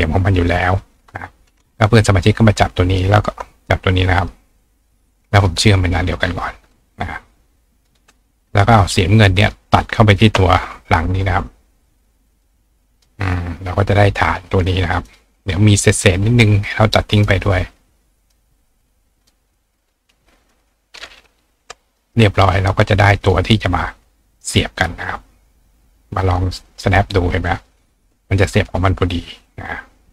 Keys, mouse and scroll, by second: 4.2 click, 5.4 click, 6.6 click, 7.4 click, 9.4 click, 10.1 shift+click, 12.3 click, 13.0 click, 13.6-14.6 ctrl+drag, 14.5-18.3 ctrl+right drag, 15.1 click, 17.1 click, 18.2-19.2 drag, 19.3-20.5 drag, 21.3-21.9 drag, 22.0-23.2 drag, 23.3 click, 26.4-28.4 drag, 28.5 click, 29.4-30.1 drag.